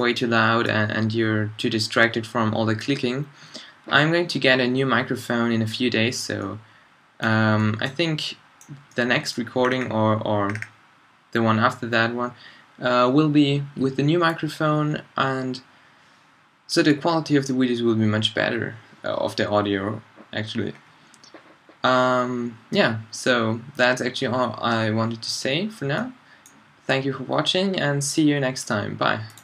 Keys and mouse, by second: 0.2 middle click, 8.4-9.1 middle drag, 20.8-26.1 middle drag.